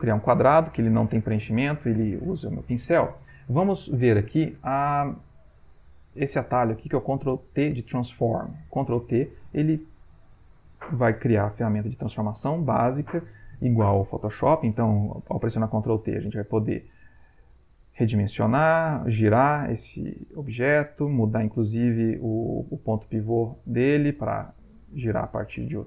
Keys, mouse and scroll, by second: 15.9-17.0 drag, 17.5 click, 18.7-20.7 drag, 21.2 click, 22.6-24.1 drag, 24.5-25.8 drag.